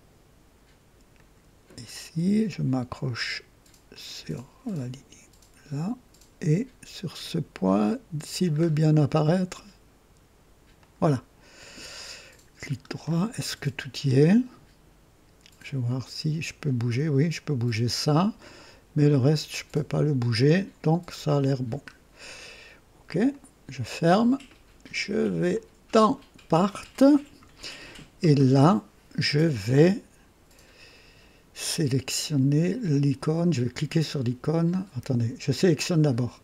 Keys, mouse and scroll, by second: 1.1 click, 3.8 click, 8.5-8.8 scroll up 2, 10.7 click, 11.9 right click, 12.7 scroll down 1, 13.3 right click, 14.2 right click, 15.8-18.2 drag, 19.4-20.5 drag, 21.1-21.5 scroll down 2, 23.2 click, 25.5 click, 26.5 click, 36.0 click.